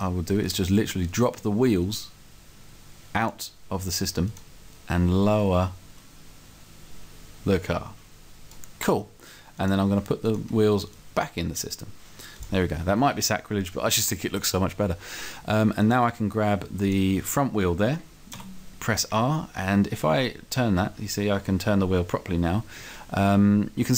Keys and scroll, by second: 18.4 r, 21.3 r.